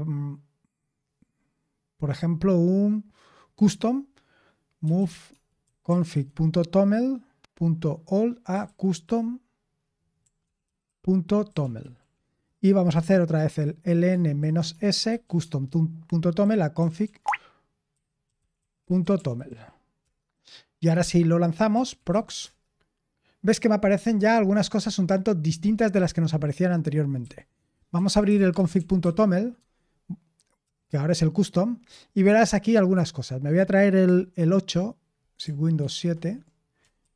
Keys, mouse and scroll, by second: 4.5-6.6 typing, 8.2-19.9 typing, 20.0 Return, 21.4-22.7 typing, 27.2-29.5 typing, 29.5 Tab, 30.6 Return, 34.3 super+8, 35.8 super+/, 37.0 super+1.